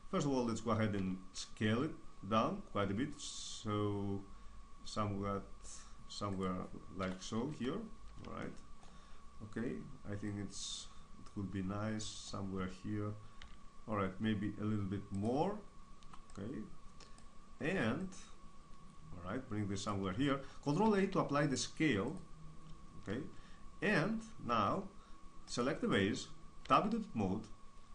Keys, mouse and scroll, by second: 0.9 s, 6.3-7.4 drag, 6.9 KP_1, 7.4 KP_3, 10.9-12.1 drag, 13.3 s, 15.2-20.8 drag, 20.8 ctrl+a, 24.4-25.5 middle drag, 25.5-27.9 right drag, 26.6 Tab.